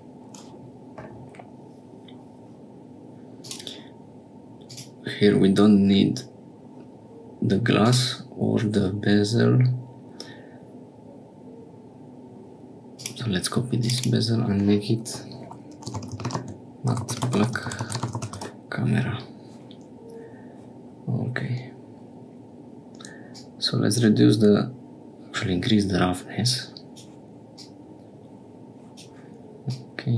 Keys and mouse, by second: 3.4 click, 4.6 click, 7.8 click, 12.9 click, 13.8 click, 16.2-19.2 drag, 16.2 t, 23.3-26.9 drag, 27.5-28.9 drag, 29.7-30.1 drag.